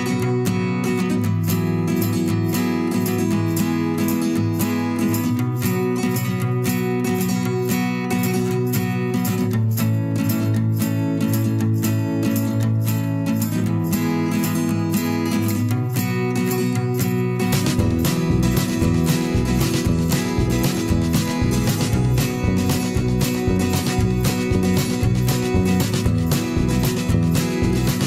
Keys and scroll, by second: 1.1 Return, 2.1 i, 3.0 v, 13.6 ctrl+[, 14.2 ctrl+], 16.0 ctrl+[, 17.6 ctrl+[, 18.5 ctrl+shift+[, 18.7 ctrl+], 19.9 ctrl+[, 20.8 ctrl+], 22.3 ctrl+shift+[, 22.5 ctrl+], 27.7 ctrl+[.